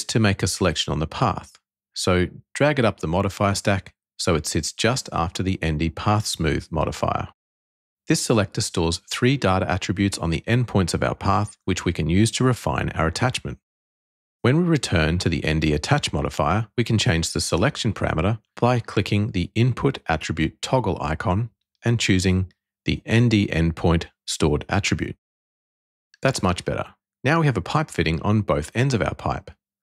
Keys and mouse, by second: 1.5-3.6 drag, 13.5 click, 18.8 click, 20.5-23.5 drag, 26.0 click, 28.9-29.8 drag.